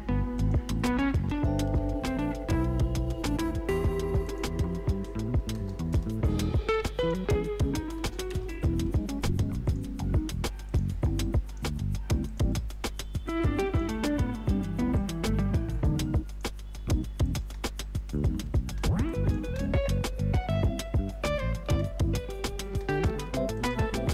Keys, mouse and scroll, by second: 1.6 ctrl+d, 3.1 s, 4.2 click, 5.9 Return, 7.0 click, 8.3 Return, 9.6 click, 14.0 Return, 14.9-17.2 drag, 17.4 space, 19.1 click, 19.4 space, 21.6 space, 23.8 click, 23.9-24.1 typing.